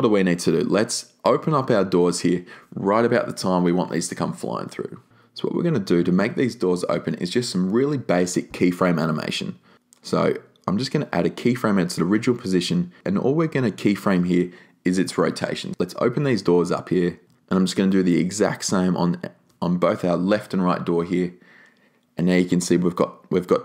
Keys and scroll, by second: 13.4 r.